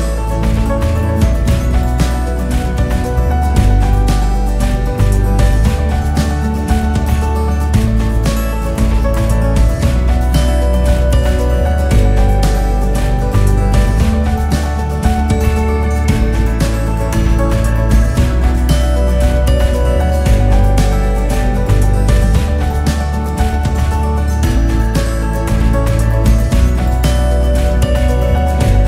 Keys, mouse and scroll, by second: 1.1 KP_6, 2.2 KP_4, 4.5 click, 5.7 KP_3, 7.0 shift+click, 8.2 g, 9.8 click, 11.1 g, 13.6 KP_1, 15.3-19.7 KP_6, 20.1 KP_1, 24.7 right click, 25.6 click, 27.4 click.